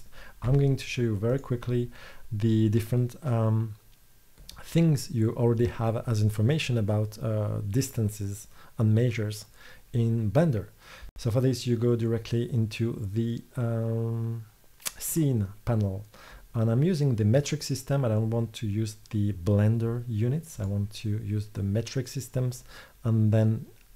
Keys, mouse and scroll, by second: 0.6 g, 2.7-4.2 middle drag.